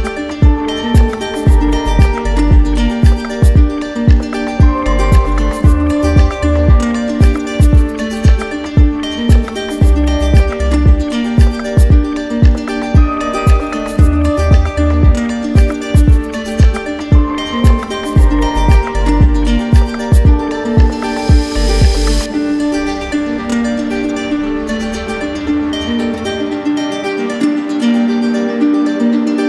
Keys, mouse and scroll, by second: 0.1 alt+click, 1.3 alt+click, 9.2 click, 10.4 click, 10.8 shift+click, 11.9 alt+click, 12.7 alt+click, 16.3-17.4 middle drag, 25.9 middle click, 26.2 middle click, 26.6 alt+click, 27.4 click, 27.8 shift+click, 28.4 alt+click.